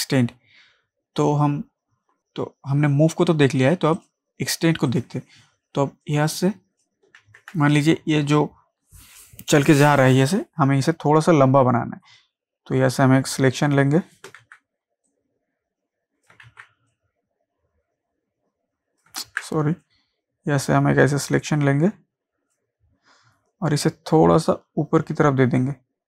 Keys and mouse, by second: 2.2 click, 4.0 click, 6.4 click, 7.3 ctrl+z, 12.2-14.4 drag, 14.4 ctrl+z, 15.1-16.5 drag, 16.5 ctrl+z, 16.9-19.2 drag, 19.2 ctrl+z, 19.8-26.0 drag.